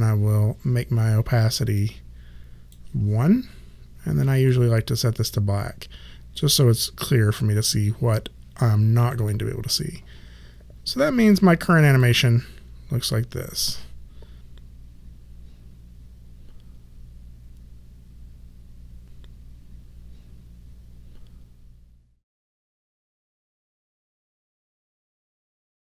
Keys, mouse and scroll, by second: 1.7 click, 4.4 click, 9.1 click, 11.8 click.